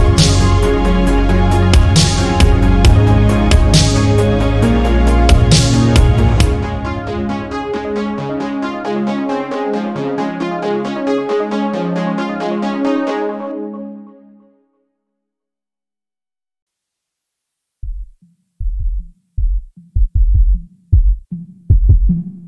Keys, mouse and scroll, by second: 0.1 Tab, 0.2 scroll down 1, 0.4-1.7 middle drag, 1.7 scroll up 1, 1.9-2.4 shift+middle drag, 2.4 scroll up 1, 2.6 Tab, 2.8 middle click, 3.1-3.7 scroll up 1, 3.7-4.7 shift+middle drag, 4.7 1, 5.0 click, 5.9 g, 7.8 middle click, 8.4 click, 8.6 g, 10.3-11.4 middle drag, 11.4 2, 11.7 click, 12.6 shift+click, 13.3 shift+click, 13.7 shift+click, 13.9 shift+middle click, 14.4 click, 16.2 ctrl+r, 17.2 middle click, 18.0 ctrl+r, 19.2 middle click, 19.7 scroll down 4, 19.9 middle click, 20.6 scroll down 1, 20.8 middle click, 21.7-22.2 scroll up 1, 22.2 scroll down 1.